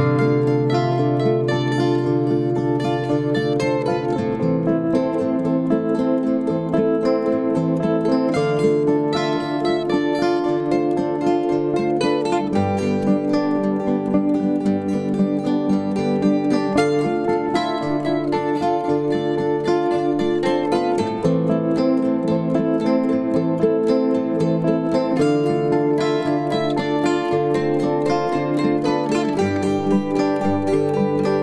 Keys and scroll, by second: 1.8 typing, 3.7 b, 11.8 ctrl+d, 13.3 typing, 14.5 ctrl+d, 16.4 ctrl+*, 20.1 Page_Up, 21.6-21.9 typing, 24.3 ctrl+s, 28.7 ctrl+d, 29.2 s.